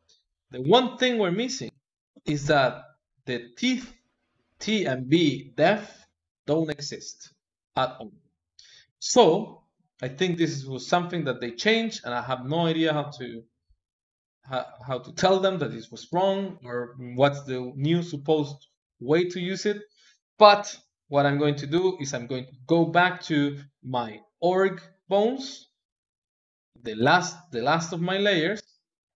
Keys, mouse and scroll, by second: 1.6-4.6 shift+middle drag, 7.1 click, 10.3 click, 10.8 click, 13.6 click, 15.9 n, 16.9 click, 21.2-24.2 drag, 24.3 click, 26.6-29.1 middle drag.